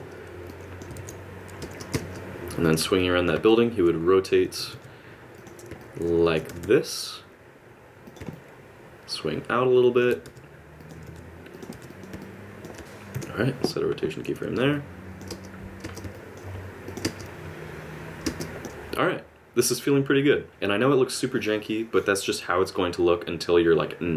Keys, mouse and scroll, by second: 0.5 middle click, 1.0 alt+a, 1.6 space, 1.9 space, 2.6 click, 3.5 middle click, 4.6 r, 5.8 middle click, 6.5 r, 8.3 middle click, 10.2 r, 10.9 r, 12.2 middle click, 13.1 i, 14.7 click, 15.3 space, 15.8 space, 16.1 middle click, 16.9 click, 17.0 space, 18.2 space, 18.4 click.